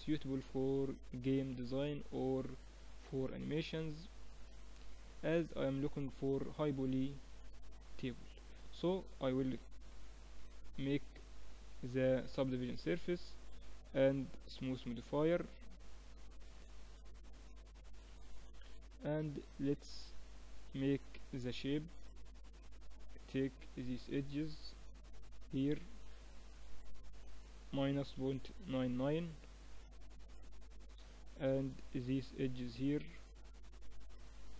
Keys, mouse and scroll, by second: 1.3 middle click, 2.1-9.5 middle drag, 8.3 Tab, 9.5 ctrl+2, 10.3 middle click, 16.5-18.6 drag, 18.3 t, 18.6 middle click, 18.7 click, 19.5 Tab, 19.9 middle click, 20.6 click, 21.4 ctrl+r, 31.7 ctrl+r.